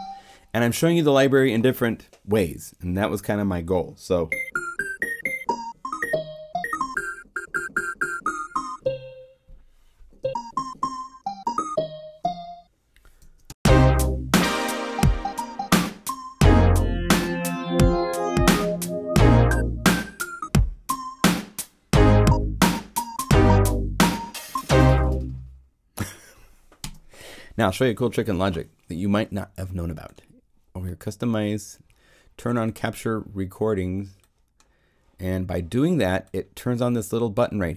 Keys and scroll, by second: 13.2 0, 13.4 Home, 26.8 0.